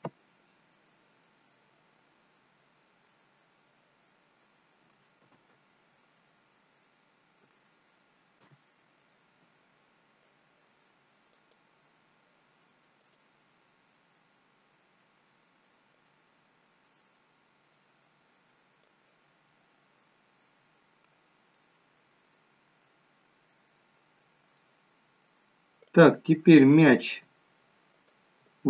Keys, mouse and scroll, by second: 1.7 click, 6.9 ctrl+z, 11.4 click, 20.6-21.5 scroll down 7, 21.5 middle click, 22.6-23.3 scroll up 2, 23.3-23.8 scroll up 3, 24.5 middle click, 25.9 click, 27.9 shift+click.